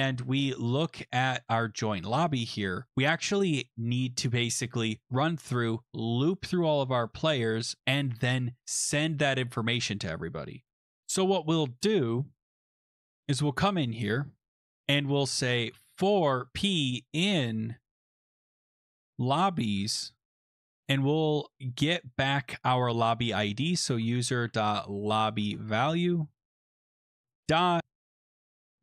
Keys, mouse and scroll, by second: 0.0 click, 0.7-2.8 scroll, 2.8 click, 10.8 scroll, 13.5 click, 14.1 Return, 14.3 Return, 15.3-20.1 typing, 23.4-28.8 typing.